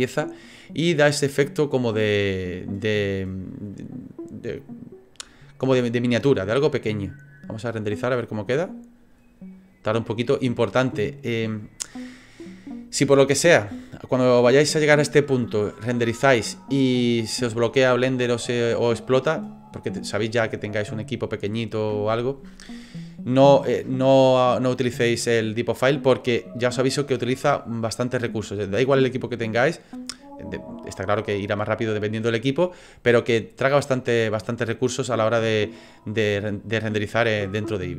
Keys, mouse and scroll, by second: 6.7 click, 36.4 click.